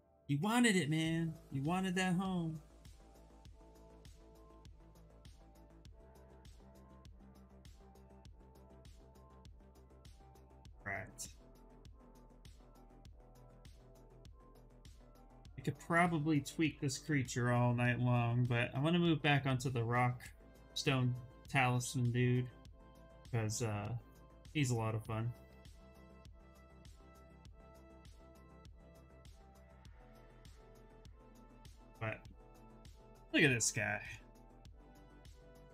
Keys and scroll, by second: 4.3 b, 4.6 v, 16.1-17.5 typing, 18.7 s, 25.5 s, 35.6 Return.